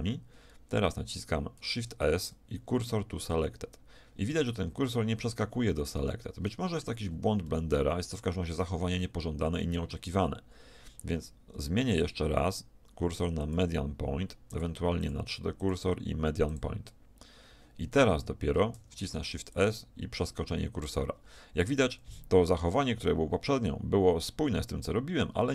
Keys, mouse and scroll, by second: 1.6 shift+s, 4.5 middle click, 4.7 middle click, 5.2 middle click, 5.6 middle click, 5.9 middle click, 7.0 z, 7.5-9.4 middle drag, 12.0-17.4 drag, 18.7 shift+s, 23.4 middle click.